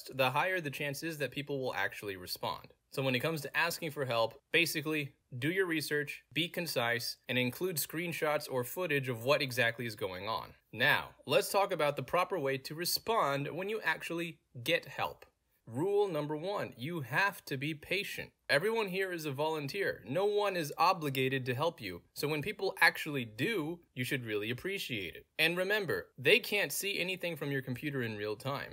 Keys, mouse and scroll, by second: 0.1 click, 2.0 click, 3.0 click, 3.9 middle click, 3.9-4.4 scroll up 3, 4.2 middle click, 6.5-7.5 middle drag, 6.5 scroll up 2, 6.5-7.5 scroll down 2, 9.2 click, 10.2-11.8 scroll down 2, 11.8-12.8 scroll down 1, 13.3 click, 14.3-19.9 middle drag, 14.3-14.9 scroll down 2, 14.9-15.9 scroll down 1, 15.9-16.8 scroll down 1, 16.8-17.9 scroll down 1, 17.9-18.9 scroll down 1, 18.9-19.9 scroll down 1, 19.9-20.4 scroll down 1, 20.4-21.7 scroll down 1, 21.7-22.9 scroll down 1, 22.9-23.7 scroll down 1, 23.7 scroll down 1, 25.1 click, 26.1 middle click, 26.1 scroll down 2, 27.6 click, 28.5-28.7 middle drag, 28.5-28.7 scroll down 2.